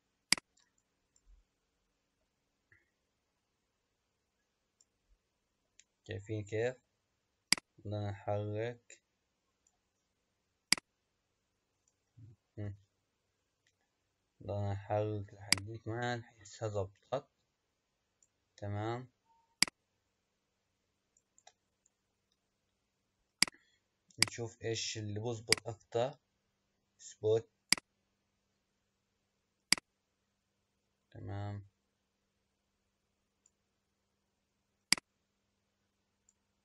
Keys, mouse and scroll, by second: 0.3 click, 1.3-2.5 middle drag, 2.5 scroll down 3, 3.2-3.8 scroll up 2, 3.8-4.4 scroll down 1, 4.4-5.0 scroll down 1, 5.0-7.5 middle drag, 7.5-10.5 drag, 10.7 click, 12.7 KP_0, 15.5-18.4 drag, 19.6-22.6 drag, 23.3 drag, 24.2-25.8 drag, 27.6-30.0 drag, 34.8 click.